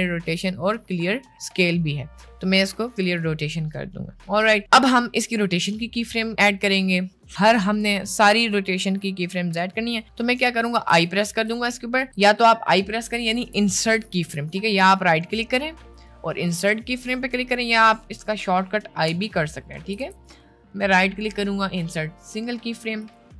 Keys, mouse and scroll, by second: 4.6 middle click, 10.9 i, 13.3 ctrl+z, 14.5 middle click, 16.0-17.6 middle drag, 19.1 i, 20.0 ctrl+z, 20.2-23.1 middle drag.